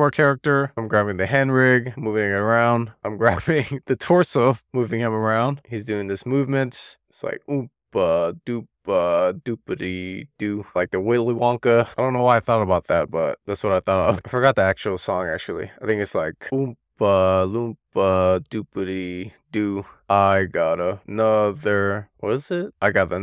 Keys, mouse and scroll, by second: 2.1 middle click, 2.6 super+z, 2.8 click, 3.5-4.1 scroll down 1, 4.1 click, 6.2 scroll down 1, 6.4 middle click, 7.2 click, 11.7 super+z, 12.3-13.7 middle drag, 14.1 super+z, 14.6-15.2 middle drag, 15.3 scroll up 1, 15.8 click.